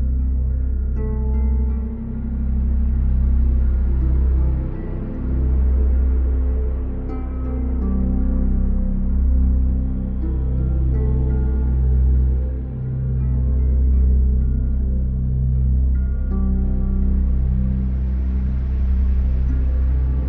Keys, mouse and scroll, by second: 0.7 middle click, 2.7 middle click, 4.3 middle click, 5.5 click, 9.4 middle click, 11.0 alt+click, 12.1 click, 13.7 alt+click, 14.9 middle click, 16.1 alt+click, 17.9 Delete, 19.6 alt+click.